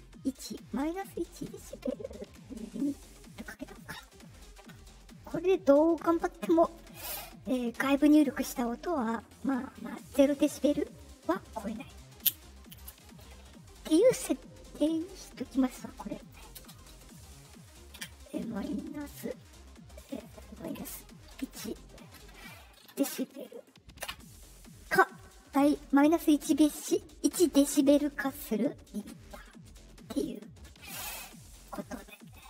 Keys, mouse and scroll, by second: 0.0-1.3 drag, 3.3 click, 15.2 middle click, 15.2 scroll down 2, 16.1 click, 16.5 space, 22.9 shift+b, 29.3 middle click, 29.3 scroll, 30.2 click, 31.5 click, 32.3 click.